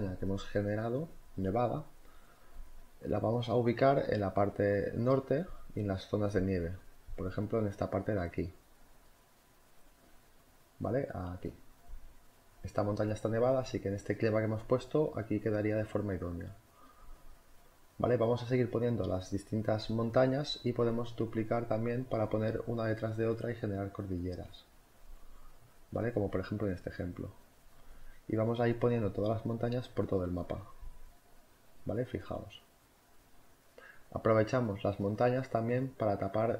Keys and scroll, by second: 3.4 ctrl+t, 5.3 Return, 5.5 z, 5.8 space, 6.3 v, 6.7 ctrl+t, 7.8 Left, 7.9 Right, 8.1 Down, 8.2 Up, 8.3 Right, 8.4 Down, 9.2 Return, 9.4 z, 10.0 v, 10.4 ctrl+t, 12.1 Return, 13.4 ctrl+t, 13.8 Return, 14.6 z, 15.6 v, 16.5 z, 16.8 ctrl+t, 18.0 z, 18.7 v, 19.0 ctrl+t, 21.3 Return, 21.4 Left, 21.5 Right, 21.6 Up, 21.7 Left, 21.7 Down, 21.9 z, 22.9 z, 23.2 v, 24.2 ctrl+t, 25.2 Return, 25.3 z, 25.6 v, 25.6 Up, 25.9 Right, 26.0 ctrl+t, 26.7 Return, 26.9 ctrl+t, 28.3 Return, 28.4 z, 28.8 space, 29.0 v, 31.8 ctrl+t, 33.2 Return, 36.2 space.